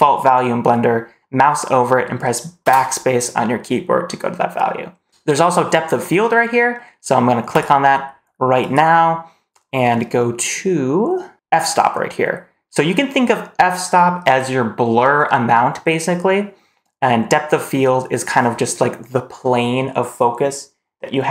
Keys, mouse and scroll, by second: 2.5 BackSpace, 7.4 click, 8.5 click.